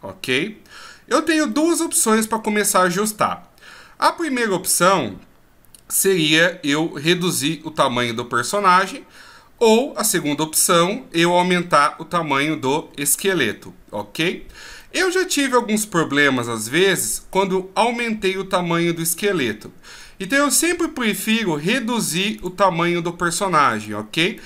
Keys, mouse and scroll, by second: 1.5 middle click, 12.8 scroll up 1, 14.1-14.8 scroll down 1, 14.8 middle click, 19.9 scroll up 1, 22.4 click, 22.4 scroll up 1, 23.7 right click.